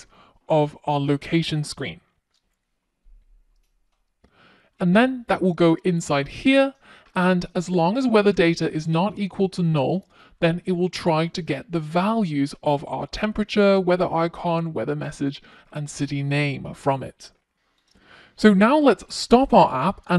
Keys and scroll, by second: 19.1 Tab.